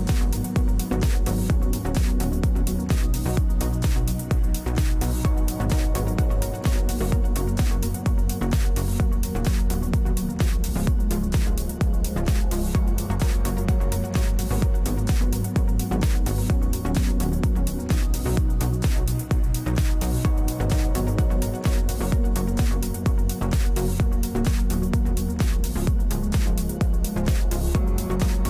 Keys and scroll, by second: 6.9 1, 18.0 w, 22.5 3.